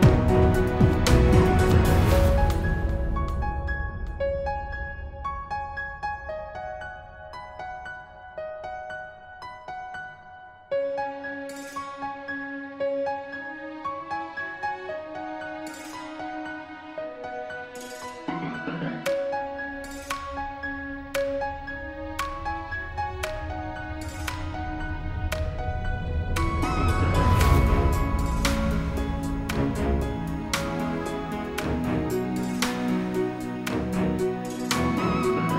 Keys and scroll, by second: 14.8 ctrl+c, 15.4 ctrl+f.